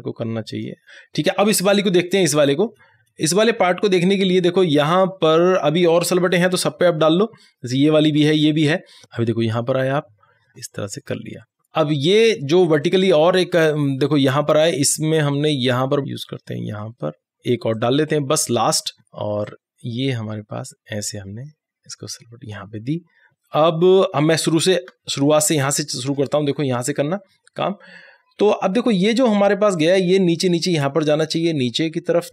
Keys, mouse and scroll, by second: 1.8 alt+scroll up 1, 5.2 alt+scroll down 1, 5.6 right click, 5.7 click, 6.2 click, 7.5 right click, 7.6 click, 8.0 alt+scroll up 1, 8.1 click, 9.9-12.0 drag, 12.0 right click, 12.5 click, 14.6-16.7 drag, 17.4 right click, 17.8-20.4 drag, 20.4 click, 20.9 alt+scroll up 1, 21.3-23.1 drag, 24.6 alt+scroll down 1, 26.2 alt+scroll up 1, 28.6 click, 29.3-32.3 drag.